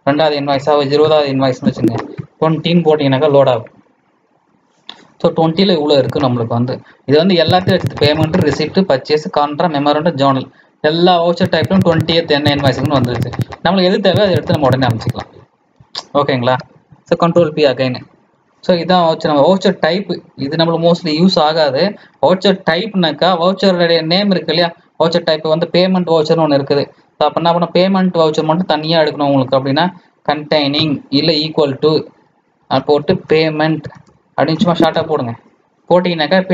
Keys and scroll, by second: 17.3 ctrl+p.